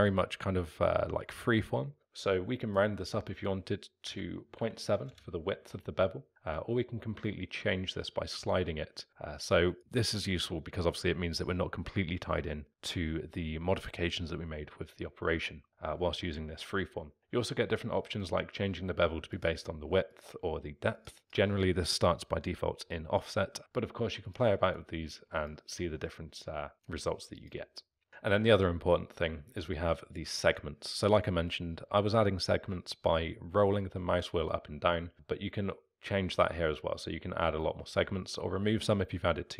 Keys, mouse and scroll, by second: 2.6-5.6 drag, 6.5-9.2 drag, 17.2-24.3 drag, 24.6-28.6 drag, 33.6-35.1 scroll up 1, 35.1-39.5 drag.